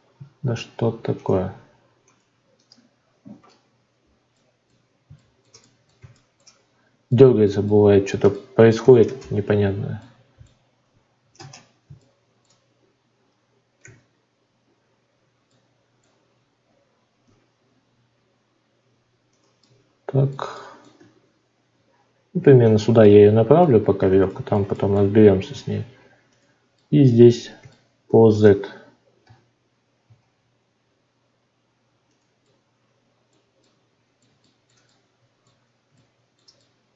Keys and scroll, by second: 3.4 Escape, 9.0 shift+space, 11.3 ctrl+space.